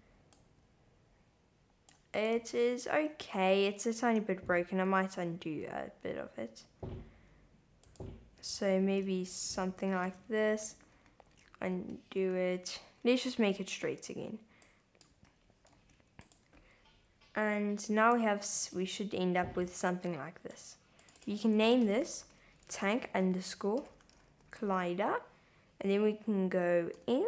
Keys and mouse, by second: 0.4-1.9 drag, 2.2 click, 2.4 Tab, 3.9 super+z, 7.8 click, 9.3 shift+z, 9.9 Tab, 10.3 shift+z, 10.9 super+z, 13.4 shift+z, 14.7 click, 15.1 Tab, 15.8 shift+z, 16.3 click, 18.8-20.5 drag, 21.2-24.5 drag, 23.6 l, 26.9 n.